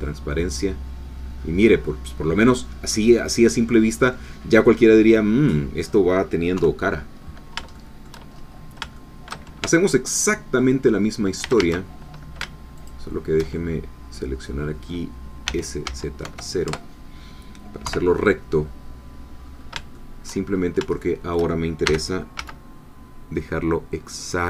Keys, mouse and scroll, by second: 0.0-3.8 middle drag, 3.8 scroll down 1, 4.2-6.0 middle drag, 6.6 3, 7.2-7.5 scroll up 2, 7.7 shift+middle click, 8.3-8.8 shift+scroll up 1, 9.0 shift+middle click, 9.6 shift+Tab, 9.9 shift+click, 11.4 a, 12.9 alt+shift+click, 13.6-15.4 alt+shift+middle drag, 15.4 s, 15.8 z, 16.2 0, 16.7 Return, 17.9 3, 19.4-19.9 scroll up 3, 19.9 shift+middle click, 20.5 shift+scroll up 3, 21.0 shift+middle click, 21.8 shift+g, 22.4 z.